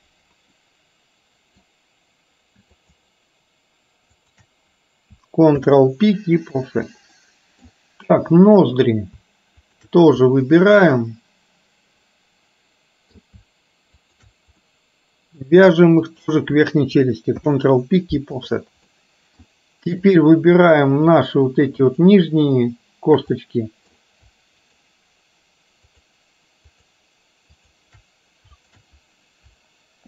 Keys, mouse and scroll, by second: 0.7-1.7 middle drag, 2.8 shift+click, 4.2 shift+click, 5.6 ctrl+p, 7.3 middle click, 8.6 click, 9.7 shift+click, 10.3-13.3 middle drag, 14.1 shift+click, 14.7 middle click, 16.1 shift+click, 17.4 ctrl+p, 19.1 middle click, 20.2 click, 21.9 shift+click, 23.4 middle click, 24.8 shift+click, 26.1 shift+click, 26.8 shift+click, 27.7 shift+click, 28.7 shift+click.